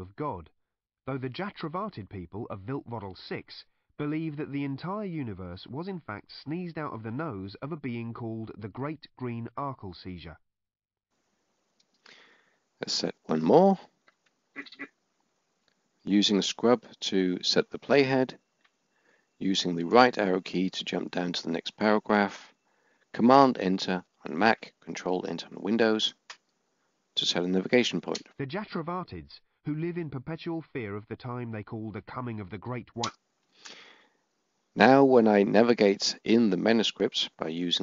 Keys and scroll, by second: 14.8-15.5 typing, 19.1 Right, 23.3 Return, 37.4 Left.